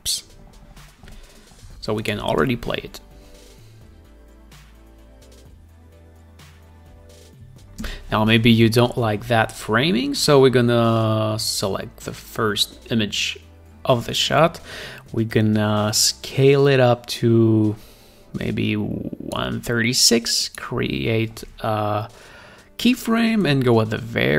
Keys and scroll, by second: 2.9 space, 8.4 space, 9.2 Up, 24.0 Down.